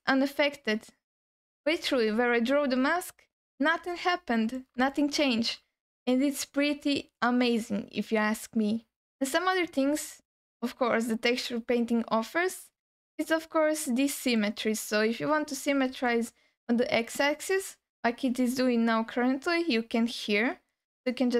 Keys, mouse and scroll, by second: 3.2-3.8 scroll down 2, 4.1 alt+middle click, 4.9 alt+shift+middle click, 10.9-11.4 scroll down 1, 11.8-12.4 scroll up 1, 13.5-14.2 scroll down 1, 14.2 click, 15.0-15.4 scroll down 2, 16.1-17.6 alt+middle drag, 17.7-18.4 scroll up 3.